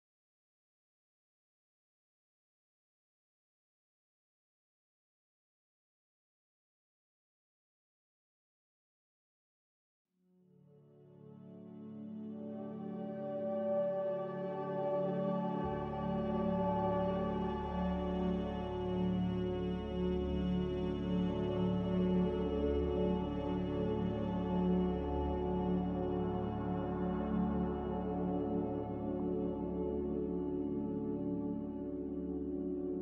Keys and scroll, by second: 3.0 g, 4.2 g, 8.7 ctrl+z, 13.3 ctrl+z, 17.3 z, 31.0 z.